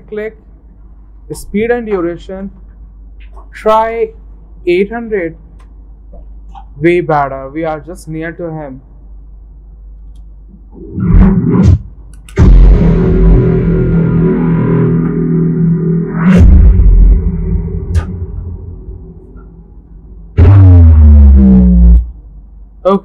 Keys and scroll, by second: 4.5-5.5 typing, 5.5 Return.